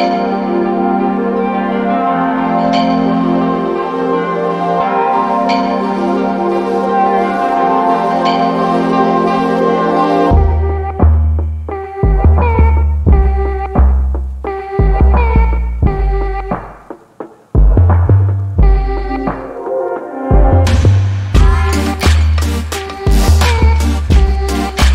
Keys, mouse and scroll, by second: 0.0-0.6 scroll up 1, 0.6 alt+click, 1.3 alt+middle click, 1.9 alt+click, 2.4 alt+middle click, 2.9-3.6 scroll down 2, 3.6 alt+middle click, 5.1-5.6 scroll up 1, 5.6 alt+click, 12.5 alt+middle click, 13.7 alt+click, 15.1 alt+middle click, 15.8 click.